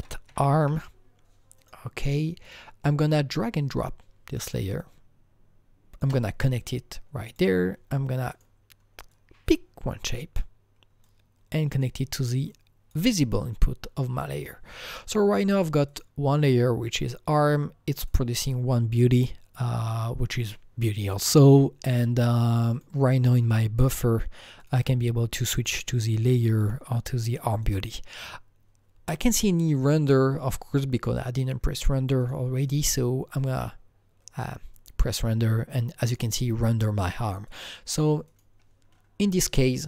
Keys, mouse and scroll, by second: 0.0-1.1 typing, 1.6 click, 2.4 click, 2.5 click, 3.4-4.8 drag, 4.8-11.0 shift+drag, 11.3-13.3 drag, 13.2-13.9 scroll up 3, 13.9-14.8 scroll down 2, 13.9-14.8 scroll up 1, 15.9 click, 18.0 click, 20.2 scroll down 1, 22.7 click, 24.6 click, 25.6 click, 26.2 click, 27.6 click, 32.2 click, 36.0 click, 36.0 click, 37.5 click, 38.3 click.